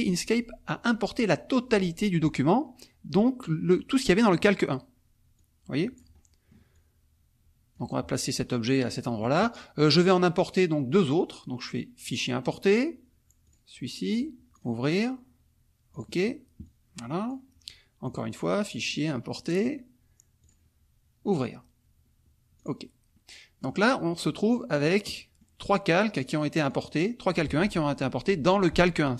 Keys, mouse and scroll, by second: 5.3-6.1 drag, 6.1 middle click, 6.7-7.9 drag, 8.5 middle click, 10.5 click, 12.1 click, 13.4 click, 14.5 click, 15.9 click, 16.6-17.4 drag, 18.9 click, 20.4 click, 21.2 click, 22.6 click, 23.1 middle click, 24.1-25.1 drag, 26.2 click, 26.6-27.1 drag.